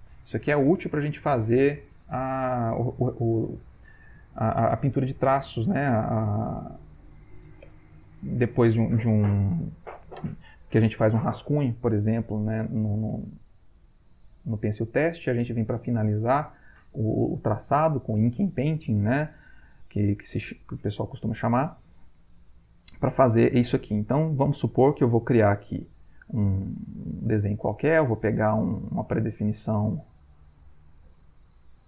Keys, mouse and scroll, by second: 21.6 Delete, 24.2 click, 26.0 click, 27.0 right click, 30.7 click.